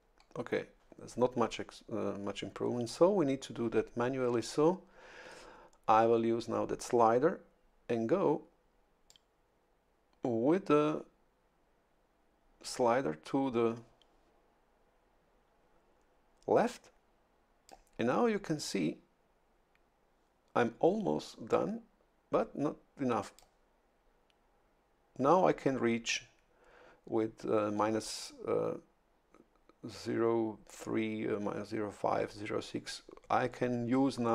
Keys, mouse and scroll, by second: 9.1-18.3 drag, 21.5-23.7 drag.